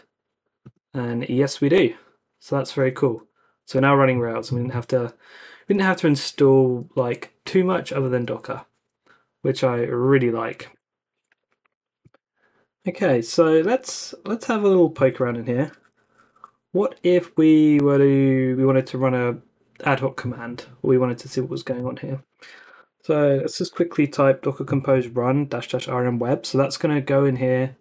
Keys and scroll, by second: 10.7 super+Tab, 15.0 ctrl+c, 21.6 super+c, 22.6 super+v, 22.8-24.2 typing.